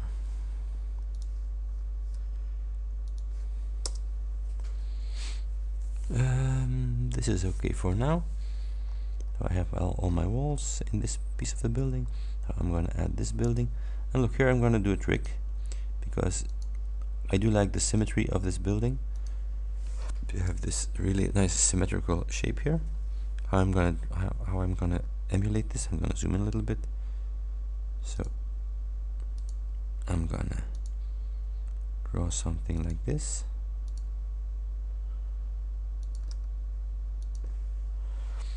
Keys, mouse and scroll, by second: 1.2 click, 3.1 ctrl+click, 3.9 Return, 8.9-9.2 scroll up 2, 9.6 scroll up 2, 10.1-10.8 scroll down 4, 11.1-11.5 scroll down 2, 11.5 click, 13.6 click, 15.2 click, 16.6 click, 18.0 click, 19.2 click, 20.7 Return, 25.3-25.9 ctrl+scroll up 4, 28.2 ctrl+click, 29.4 ctrl+click, 30.8 ctrl+click, 32.8 ctrl+click, 34.0 ctrl+click, 36.1 ctrl+click, 37.3 click.